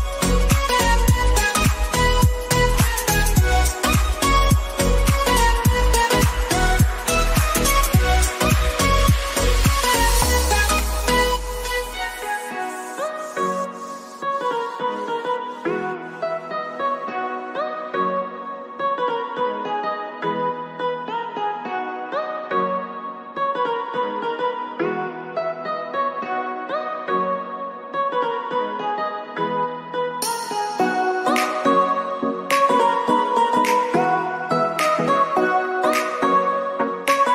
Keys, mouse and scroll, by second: 0.4 click, 5.4 click, 12.5-16.7 drag, 17.1 click, 27.7-34.9 drag, 35.9-37.0 scroll up 1, 37.1-37.3 scroll up 1.